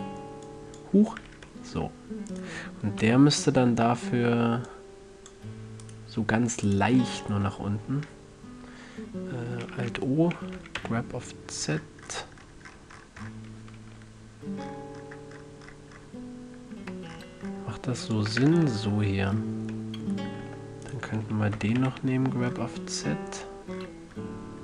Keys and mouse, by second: 0.8-1.8 drag, 1.6 a, 1.8-2.2 middle drag, 2.2-2.7 drag, 2.7-4.2 middle drag, 3.4 KP_3, 7.6-9.4 middle drag, 10.1 alt+o, 10.9 g, 18.5-20.2 drag, 18.6 a, 18.8 Tab, 20.2 middle click, 20.8 Tab, 21.9 g.